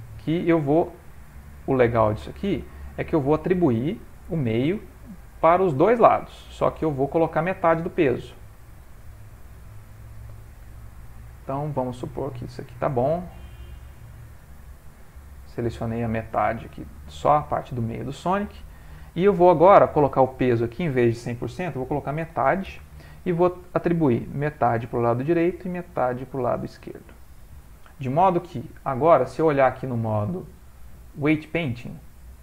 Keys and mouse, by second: 1.3 alt+shift+click, 1.5 middle click, 3.0 ctrl+middle click, 3.1 ctrl+middle click, 3.5 middle click, 4.3 middle click, 5.1 ctrl+middle click, 5.5 middle click, 6.4 ctrl+middle click, 7.4 alt+shift+click, 8.1 middle click, 9.1 alt+shift+click, 11.1 alt+shift+click, 13.1 alt+shift+click, 14.3 alt+shift+click, 14.5 middle click, 15.8 middle click, 16.7 ctrl+middle click, 16.8 ctrl+middle click, 17.1 middle click, 17.2 middle click, 17.7 ctrl+middle click, 20.5 click, 24.4 click, 25.6 click, 27.6 click, 27.7 ctrl+middle click, 29.2 click.